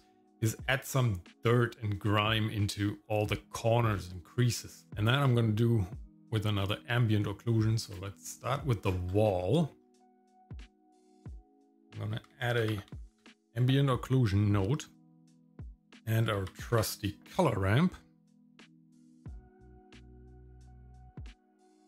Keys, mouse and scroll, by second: 4.9-6.0 scroll down 1, 6.2 click, 7.9 click, 8.8-9.4 scroll down 3, 9.4 middle click, 9.8 scroll up 1, 10.2 middle click, 11.1 shift+a, 15.9 shift+a, 19.9 scroll up 2, 20.9 click.